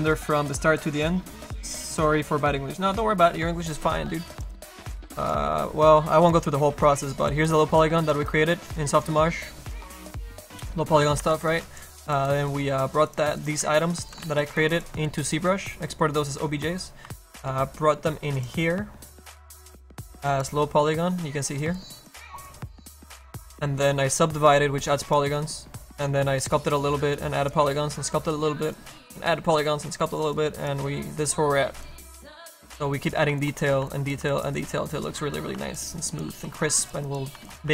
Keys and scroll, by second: 7.0 space, 8.2 space, 9.6 space, 9.8 space, 10.5 a, 11.3 ctrl+z, 11.5 space, 13.6 a, 14.2 z, 14.6 space.